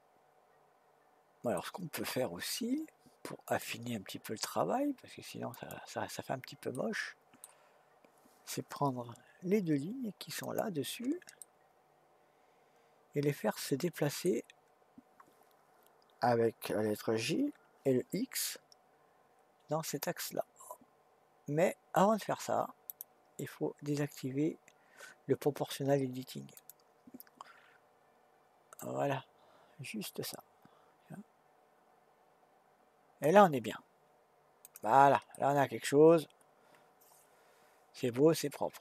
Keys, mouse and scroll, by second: 3.5 click, 5.5 click, 6.7-9.8 middle drag, 10.4 shift+click, 11.4-14.4 middle drag, 17.3 g, 26.5 click, 28.8 click, 34.6 click, 35.3-38.3 middle drag.